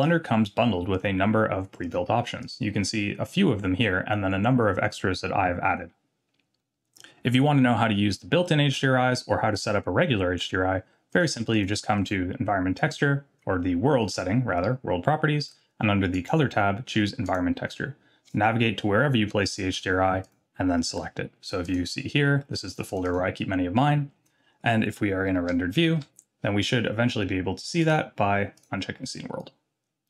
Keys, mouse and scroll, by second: 0.9-11.6 drag, 12.0 click, 16.1-17.3 drag, 20.2 click, 25.5 z, 27.8-29.6 drag.